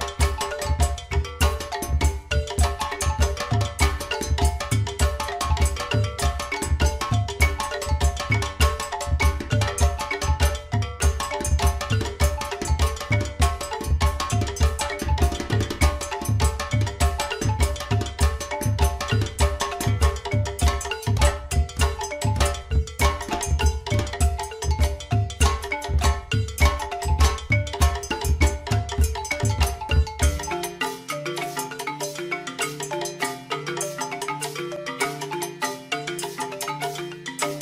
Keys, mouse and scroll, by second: 1.2 click, 3.0 g, 10.3 click, 11.4 g, 17.0 click, 21.1 click, 22.6 shift+d, 29.3 click, 36.1 click.